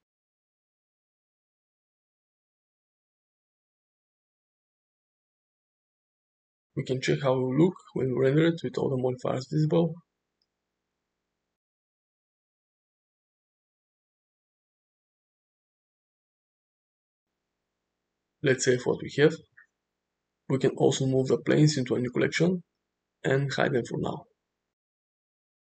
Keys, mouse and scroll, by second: 1.3 space, 3.5 click, 4.7 ctrl+z, 4.8 click, 5.4 click, 6.7 space, 7.5 space, 7.8-8.3 middle drag, 7.8 g, 8.7 middle click, 9.2 click, 9.5 click, 10.0 click, 10.5 click, 10.6 middle drag, 10.9 shift+middle click, 11.8 middle click, 12.4-12.7 shift+middle drag, 13.2-15.0 drag, 15.5-15.9 middle drag, 16.0 middle click, 16.6 click, 16.9 click, 17.5 shift+middle drag, 17.9 shift+middle click, 18.2 click, 20.9 m, 25.1 p.